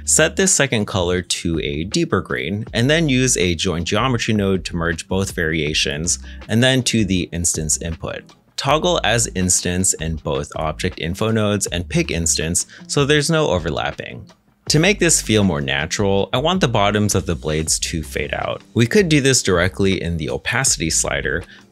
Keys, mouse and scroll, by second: 3.1 g, 3.4 shift+a, 4.7 j, 4.8 o, 4.9 i, 5.1 n, 5.3 Return.